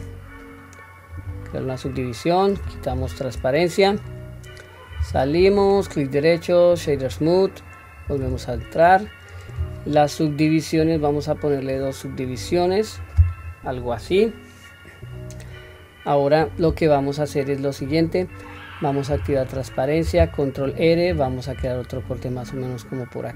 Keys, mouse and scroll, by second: 5.1 Tab, 5.6-8.1 right drag, 8.2 Tab, 10.8 click, 21.1 ctrl+r.